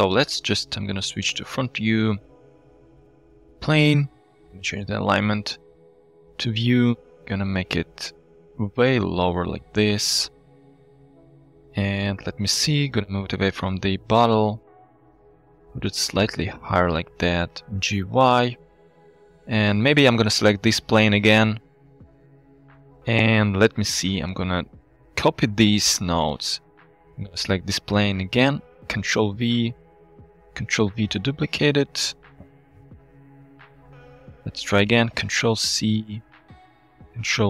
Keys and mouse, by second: 0.8 KP_1, 1.9 shift+click, 2.8 shift+a, 5.0 shift+a, 5.8-6.3 drag, 7.0 Tab, 7.9 s, 9.8 s, 10.9 s, 11.5 Tab, 11.8-12.1 middle drag, 13.2 g, 13.3 y, 14.1 middle click, 14.1 click, 15.0 g, 15.0 z, 15.9 click, 16.3-17.1 drag, 17.5 g, 17.6 y, 18.2-19.3 middle drag, 20.5 middle click, 22.5 middle click, 23.3 shift+click, 24.2 click, 25.6 ctrl+c, 26.6 click, 27.4 click, 28.4 middle click, 29.0 ctrl+v, 30.1 click, 30.6 ctrl+v, 31.9 click, 33.8 click, 35.3 ctrl+c, 36.0 click, 36.9 ctrl+v.